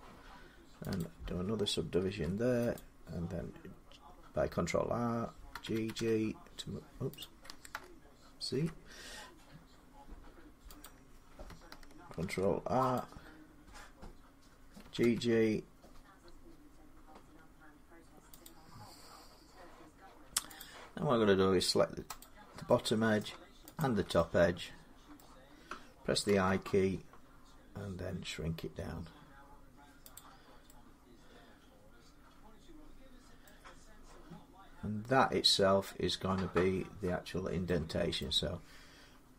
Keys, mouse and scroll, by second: 0.8 click, 1.0 g, 1.8 ctrl+r, 2.5 click, 5.3-5.7 typing, 7.0 click, 8.3 ctrl+z, 10.1 g, 10.6 click, 12.0 ctrl+r, 12.7 click, 14.6 typing, 17.0 g, 18.2 click, 20.4 click, 22.0 click, 23.0 middle click, 23.6 shift+click, 25.0 middle click, 26.1 i, 29.9-33.1 drag, 29.9-33.1 middle drag, 38.0 middle click.